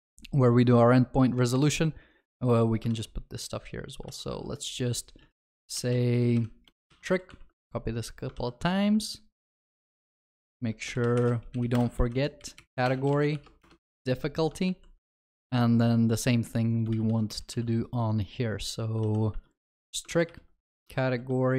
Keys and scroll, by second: 1.6 ctrl+c, 2.9 ctrl+w, 6.3 ctrl+v, 6.7 Return, 7.3 ctrl+c, 8.3 ctrl+w, 9.6 ctrl+v, 11.7 Return, 16.9 ctrl+w, 19.0 ctrl+w, 20.2 ctrl+w, 20.8 ctrl+v, 21.0 ctrl+w.